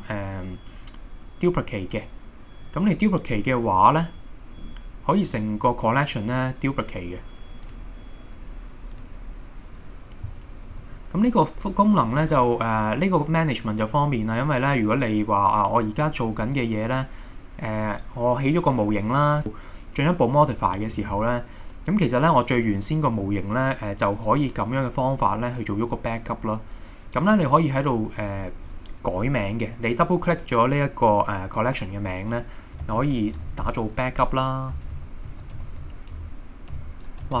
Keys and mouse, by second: 3.2-5.4 right drag, 7.7 click, 10.8 middle click, 27.2 click, 27.4-37.4 drag.